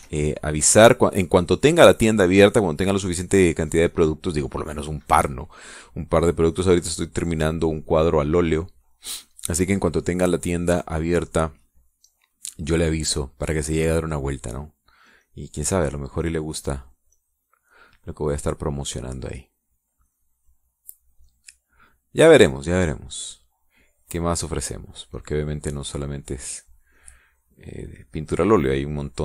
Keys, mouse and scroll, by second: 0.0 e, 0.1 click, 0.8 e, 1.1-2.1 drag, 3.3 middle click, 3.4 click, 8.1-12.0 drag, 15.6-18.9 drag, 20.1-23.2 drag, 26.0-29.2 drag.